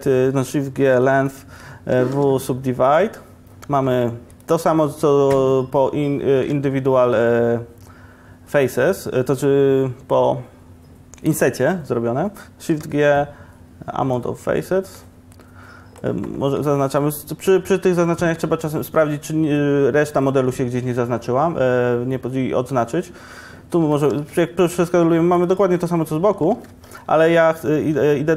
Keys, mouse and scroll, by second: 0.9 shift+g, 2.2 w, 4.2 1, 12.8 shift+g, 23.9 s, 26.6 ctrl+z.